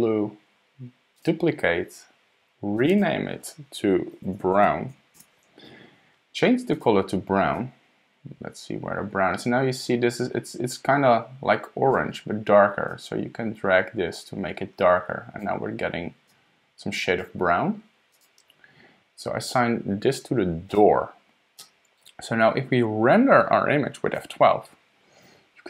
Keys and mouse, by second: 1.1 click, 2.8 click, 2.9-4.0 drag, 4.4-5.8 drag, 6.7 click, 20.7 click, 24.2 F12.